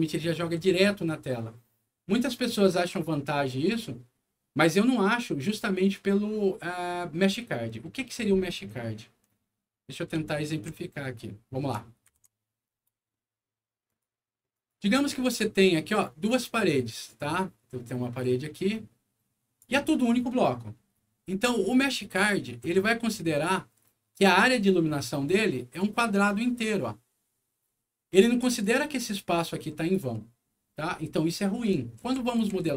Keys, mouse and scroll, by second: 10.5 super+e, 12.0 ctrl+Print, 13.8 ctrl+click, 14.5 ctrl+click, 15.8-16.9 ctrl+drag, 18.2-19.5 ctrl+drag, 21.9 ctrl+click, 25.7-28.1 ctrl+drag, 28.6 ctrl+click, 29.3 ctrl+click.